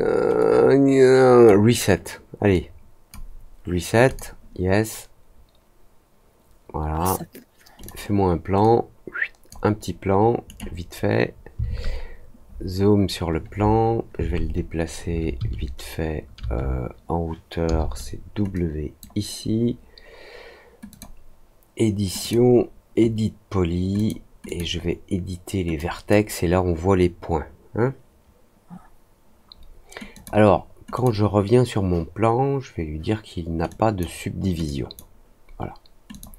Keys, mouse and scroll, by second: 0.3-1.4 drag, 2.5 click, 4.0 click, 7.7 click, 8.5 click, 10.4 right click, 12.5 middle click, 18.5 click, 20.8 click, 22.1 click, 23.9 click, 24.4 click, 25.7-26.0 drag, 30.1 click, 30.9 click, 33.6 drag, 34.6 click, 36.0 click.